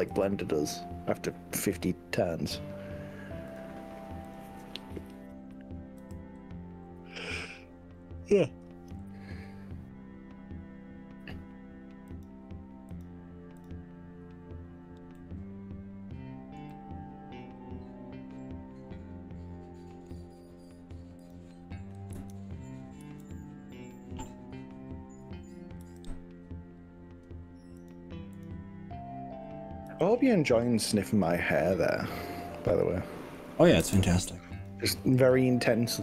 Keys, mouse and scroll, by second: 0.3 g, 0.5 scroll down 1, 0.9-1.3 scroll up 3, 1.9 scroll up 2, 3.5 drag, 4.3 click, 5.4 scroll down 1, 5.7-6.1 scroll up 2, 6.1 g, 6.5-7.1 scroll down 3, 7.7-8.3 scroll down 4, 9.1 scroll down 1, 9.7 scroll down 2, 12.1 click, 12.9 click, 13.7 click, 15.2-20.3 middle drag, 21.3 click, 22.1 KP_1, 23.0 KP_3, 25.8 g, 27.9 click, 28.4 click, 29.9 g, 32.8 click, 33.5 click, 33.9 g, 34.7 click, 35.1 g, 35.3 click.